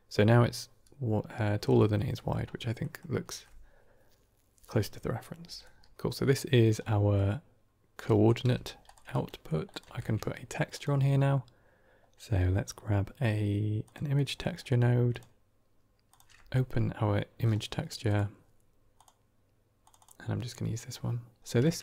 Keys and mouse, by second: 1.6 middle click, 2.0 middle click, 2.7 middle click, 5.6 middle click, 6.8 middle click, 7.9 drag, 8.3 g, 8.9 click, 9.2 middle click, 9.8 shift+a, 16.0 click.